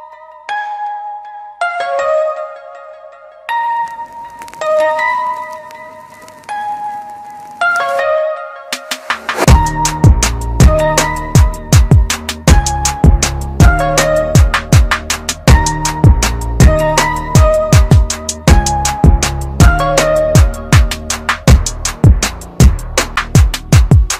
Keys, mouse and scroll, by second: 10.3 ctrl+KP_Subtract, 13.2 click.